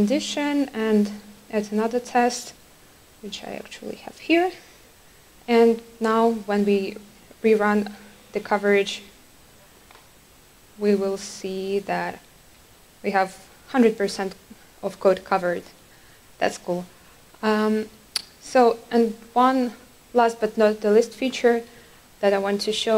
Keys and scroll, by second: 0.9 ctrl+shift+super+F12, 6.7 ctrl+r.